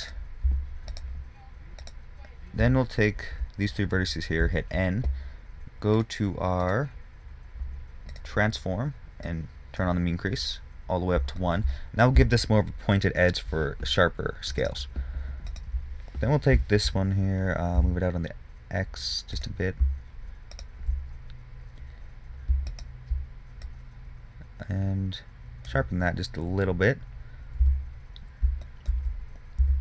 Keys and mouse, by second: 4.8 n, 10.7 click, 14.9-20.0 drag, 16.8 g, 20.9-25.8 drag, 28.0 Tab.